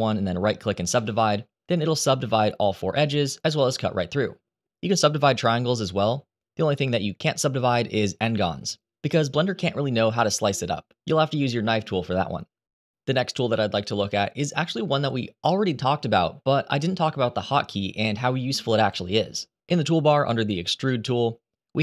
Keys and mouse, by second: 8.5 right click, 20.6-21.8 drag.